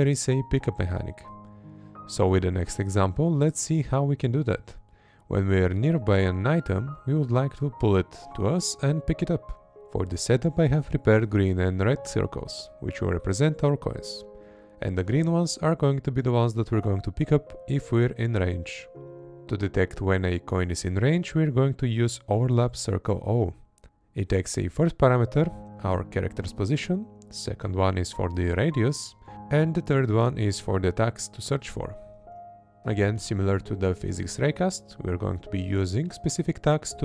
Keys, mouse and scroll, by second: 0.1 Right, 1.0 Left, 2.2 Left, 5.1 Right, 6.1 Left, 8.7 Left, 9.1 Right, 10.1 Left, 11.9 Right, 12.9 Left, 14.4 Left, 16.1 Right, 17.1 Left, 20.6 Right, 25.0 Right, 26.1 Left, 27.7 Right, 29.0 Right, 30.1 Left, 31.8 Left, 33.2 Right, 34.5 Left, 35.3 Right, 36.1 Left.